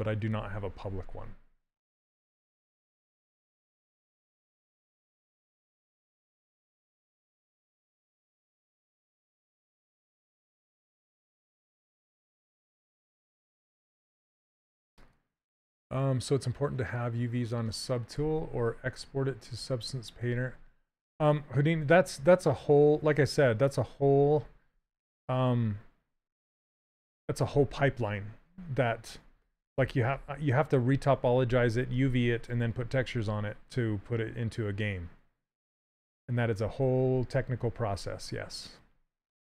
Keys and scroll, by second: 9.6 q, 20.3 s.